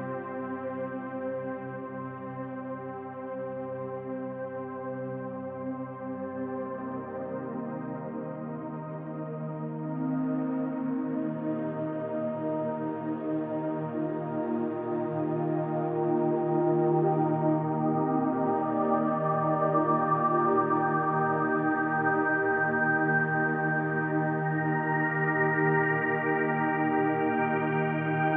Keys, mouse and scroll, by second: 0.2 shift+click, 1.0-1.9 drag, 2.6-3.3 middle drag, 6.5 click, 7.6 shift+click, 8.4 shift+click, 9.7 KP_3, 11.2-12.0 drag, 12.7-13.3 drag, 14.0 click, 15.4-17.4 middle drag, 18.0 click, 19.0 2, 19.1 click, 20.2 ctrl+b, 21.7-22.0 scroll up 1, 23.0 click, 23.5-23.9 middle drag, 24.2-24.7 scroll up 2, 25.2 click, 25.8 click, 27.6-28.3 drag.